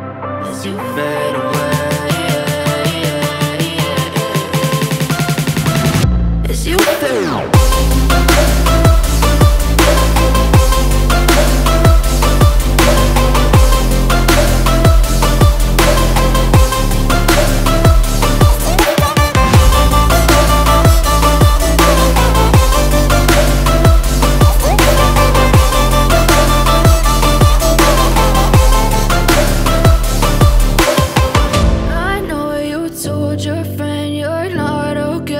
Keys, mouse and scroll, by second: 0.8-1.2 alt+scroll down 3, 2.6 alt+scroll up 1, 3.2 alt+scroll down 1, 4.3 click, 6.6 click, 7.8 Return, 8.9-9.5 alt+scroll up 1, 11.3-12.2 typing, 14.7-26.6 alt+drag, 26.6 space, 26.7-32.9 drag, 33.6 alt+scroll down 1, 34.1 space, 34.2 click, 34.5 space.